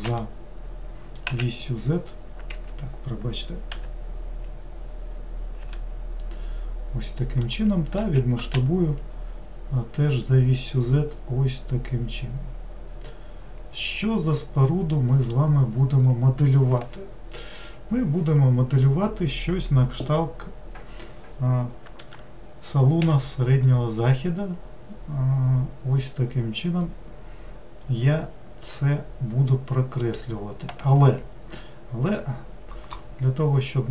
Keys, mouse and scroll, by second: 3.7 g, 8.0 s, 23.0 e.